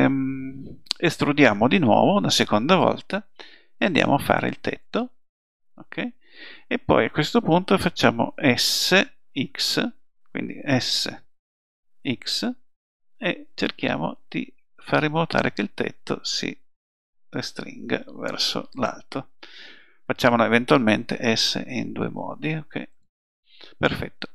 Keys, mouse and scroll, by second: 2.1 e, 10.8 s, 21.2 s.